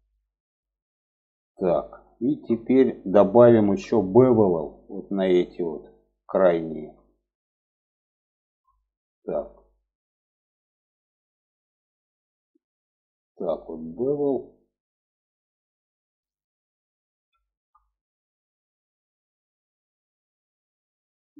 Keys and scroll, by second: 2.9 2.